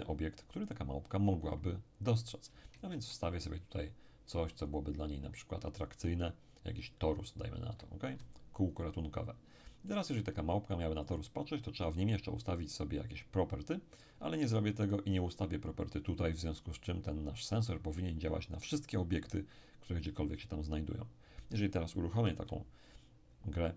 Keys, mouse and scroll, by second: 2.7 shift+a, 6.2 click, 7.8 click, 9.4-9.9 ctrl+scroll up 2, 9.9 right click, 11.0 right click, 14.8 right click, 22.4 p.